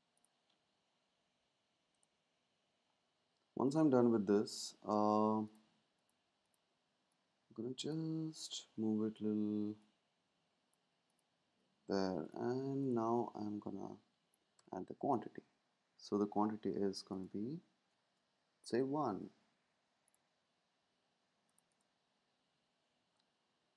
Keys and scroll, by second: 18.4 Up, 18.5 typing.